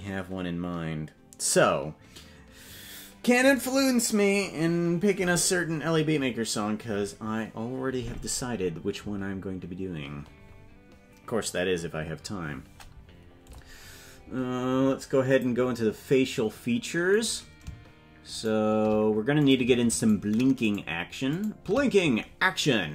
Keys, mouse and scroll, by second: 15.3 click, 15.9 click, 17.3 right click, 18.6 shift+right click, 19.6 right click, 21.5 shift+right click.